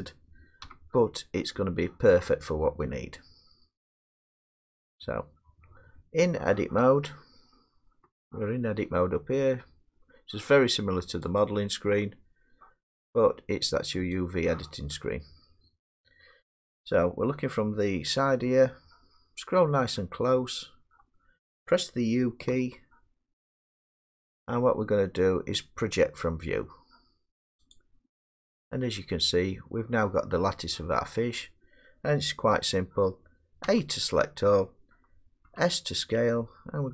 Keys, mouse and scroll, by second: 0.6 1, 8.0 Tab, 8.7 Tab, 11.4 click, 14.1 click, 18.3-20.9 scroll, 22.5 u, 27.7 click, 30.0 click, 33.6 a, 35.4 s.